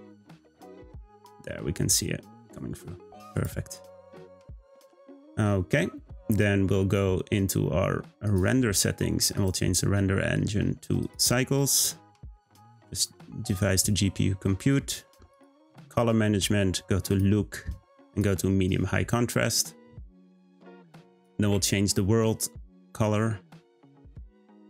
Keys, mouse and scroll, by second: 3.3 click, 3.9-5.8 scroll up 4, 8.2 click, 9.3-15.7 drag, 15.7-16.7 scroll down 6, 17.1-20.1 drag, 22.7 click, 23.6 click.